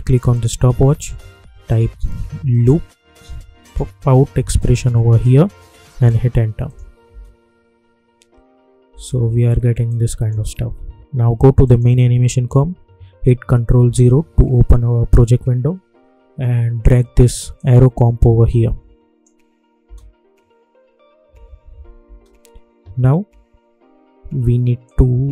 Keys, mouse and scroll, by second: 0.3 alt+click, 1.5-3.0 typing, 4.3 Down, 5.9 Return, 6.6 click, 7.0 space, 9.8-11.6 drag, 13.8 ctrl+0, 17.5-19.8 drag, 19.8 space, 21.9 space, 23.5-23.9 alt+scroll up 1, 24.8-25.3 drag.